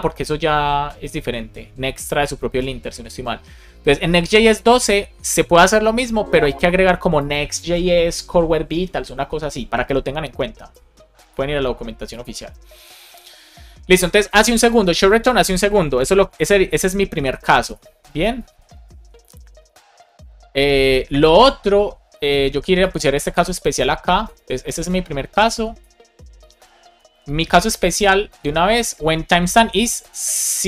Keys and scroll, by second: 15.9-18.3 typing, 19.1 Right, 19.4 space, 19.9 shift+., 20.1 space, 20.8 shift+[, 21.1 Return, 24.3 super+c, 26.8 Return, 27.4 Up, 27.8 Return, 28.3 super+v.